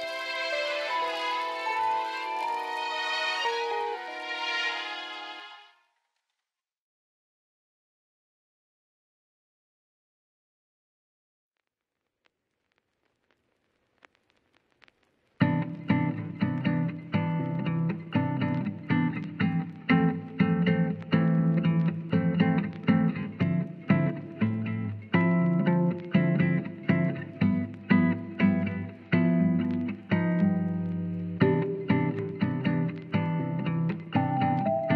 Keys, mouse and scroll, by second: 1.7 alt+z, 3.8 KP_3, 4.0 alt+z, 6.1 right click, 7.3 shift+middle drag, 8.0-8.9 drag, 10.6 click, 11.7-12.4 middle drag, 13.2 click, 15.0 KP_1, 15.8 shift+middle drag, 16.2 alt+z, 19.8 shift+middle click, 20.8 Tab, 21.1 Tab, 21.5 Tab, 22.0 Tab, 22.4 shift+middle click, 23.9 click, 24.5 alt+z, 24.8 middle click, 25.4 click, 25.8 shift+click, 26.5-29.4 middle drag, 31.6 e.